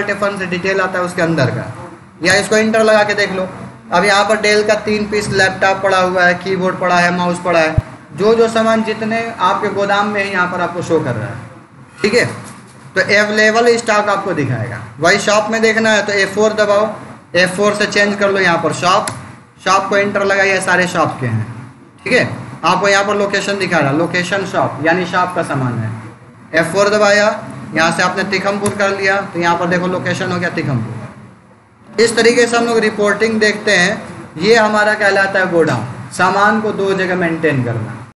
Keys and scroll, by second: 2.1 Return, 6.8 Down, 16.0 F4, 17.7 Up, 18.9 Return, 20.6 Up, 26.8 F4, 27.7 Down, 28.5 Return.